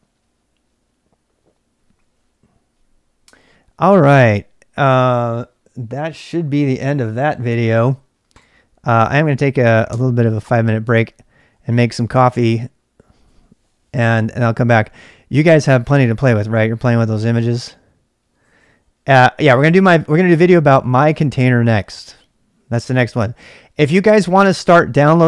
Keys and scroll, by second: 9.8 ctrl+c, 10.2-12.1 typing.